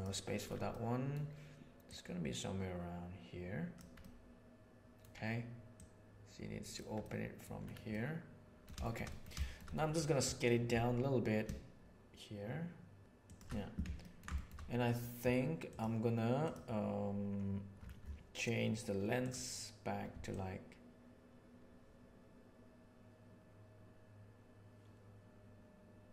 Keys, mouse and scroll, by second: 0.7 middle click, 1.8 click, 2.4-3.8 right drag, 4.0-5.0 middle drag, 5.8 right click, 7.0-7.5 middle drag, 7.9-8.7 middle drag, 9.1-9.5 shift+middle drag, 9.8 middle click, 10.7 s, 14.0 ctrl+middle click, 14.4 shift+middle click, 20.4-26.1 shift+middle drag.